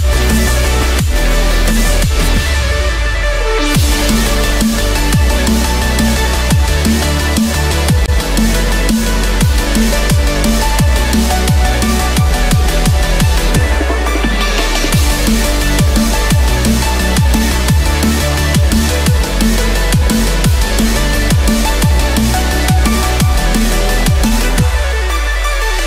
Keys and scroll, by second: 4.8 ctrl+=, 8.4 ctrl+-, 15.1 ctrl+=.